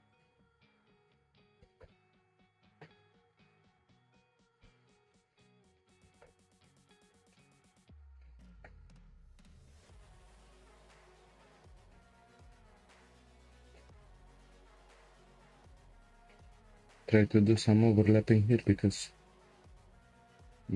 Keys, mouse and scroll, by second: 0.1 click, 0.4 Tab, 0.9 click, 1.6 g, 3.6 click, 4.9 g, 8.4 Tab, 8.5 click, 8.8 Tab, 9.9 click, 10.8 g, 12.3 click, 13.1 shift+click, 13.6 shift+click, 14.8 g, 18.0 click, 18.5 shift+click, 19.3 g.